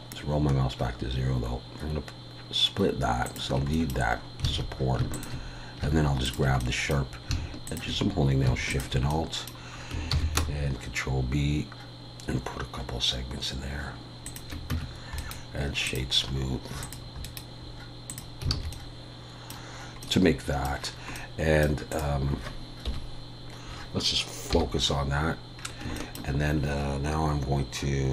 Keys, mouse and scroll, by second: 3.7 middle click, 4.1-4.5 scroll up 3, 4.5 alt+a, 5.1 alt+shift+click, 6.6 middle click, 7.7 alt+shift+click, 9.1 middle click, 10.1 ctrl+b, 15.2 right click, 16.2 scroll down 1, 16.8 click, 16.8-17.2 scroll down 3, 17.2 right click, 18.5 alt+a, 18.7 middle click, 19.8 scroll up 2, 20.0 middle click, 20.8-21.2 scroll down 4, 21.1 scroll up 1, 21.2 middle click, 21.9 click, 22.9 KP_1, 24.5 /, 25.2 scroll up 1, 25.6 scroll down 1, 25.8 scroll down 2, 26.0 shift+middle click.